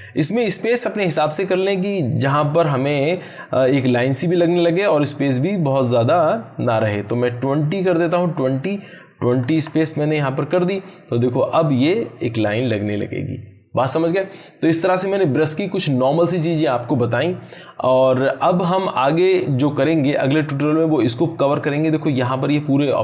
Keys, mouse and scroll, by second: 2.6-7.9 drag, 11.3-13.1 drag.